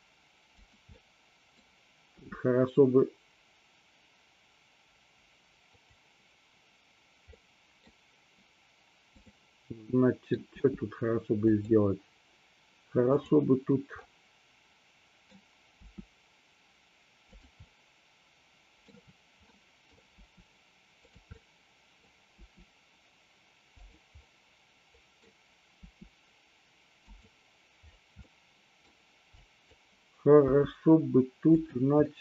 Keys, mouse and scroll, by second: 0.6 click, 1.1-1.6 middle drag, 2.2 r, 5.9 click, 7.4-8.0 middle drag, 9.2 click, 9.9-10.5 middle drag, 10.6 r, 11.6 drag, 13.2 click, 14.1-15.4 middle drag, 15.9 r, 17.7-19.0 middle drag, 19.6 middle click, 20.2 r, 21.1 click, 21.4 middle click, 22.4 r, 23.9 click, 24.4-25.4 middle drag, 25.9 r, 27.1 click, 28.4-29.0 middle drag, 29.4-29.7 drag, 30.5 g, 31.6 click, 32.1-32.2 middle drag.